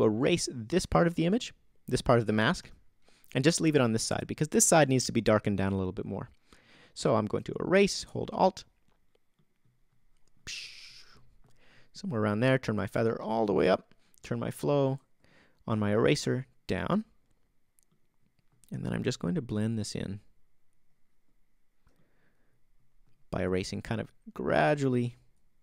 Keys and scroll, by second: 2.6 o.